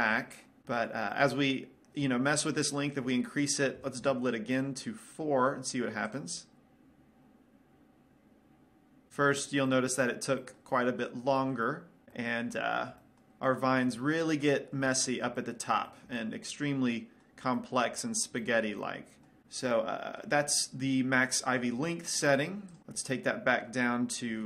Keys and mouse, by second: 2.9-4.7 drag, 15.4 middle click, 16.6-22.8 middle drag, 23.2-24.4 drag.